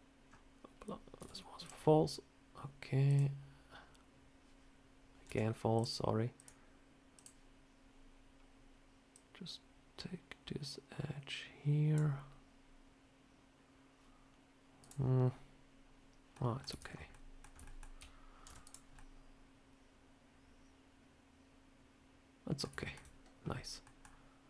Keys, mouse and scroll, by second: 1.1 z, 3.0 click, 5.1 z, 6.2 click, 14.7 click, 16.2 middle click, 16.6 Tab, 16.7-17.2 scroll down 3, 17.0 middle click, 17.5 shift+middle click, 18.3 z, 18.8 middle click, 22.6 shift+middle click, 23.7 middle click.